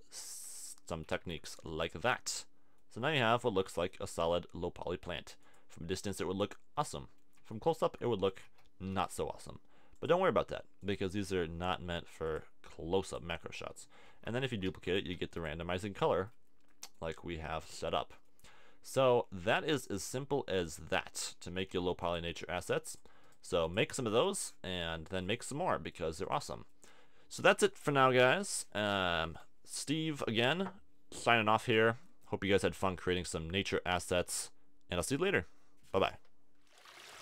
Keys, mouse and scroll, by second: 1.1 a, 1.2 Tab, 2.2 middle click, 5.4 click, 7.5 Tab, 7.9 Tab, 8.4 t, 11.2 t, 14.1 shift+d, 14.7 shift+d, 15.1 shift+d, 16.7 middle click, 21.7 x, 22.7 x, 23.4 x, 27.9-29.2 middle drag, 31.1 middle click.